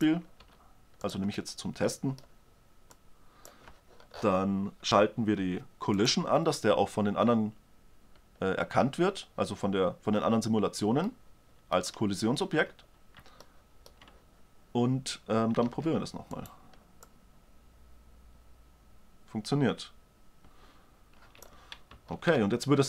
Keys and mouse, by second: 1.0 s, 5.0-8.3 drag, 11.7 click, 16.2 alt+a, 16.9-17.7 drag, 17.6 right click, 22.7 alt+a.